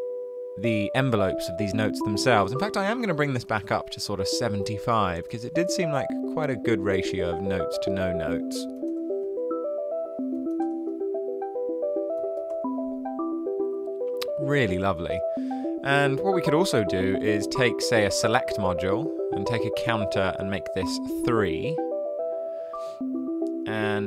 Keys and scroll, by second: 3.1-7.2 typing, 8.5-9.2 typing, 10.4 typing, 12.2 typing, 15.7-16.7 typing, 19.0 super+c, 19.7 super+v, 20.6 3, 20.8 Return.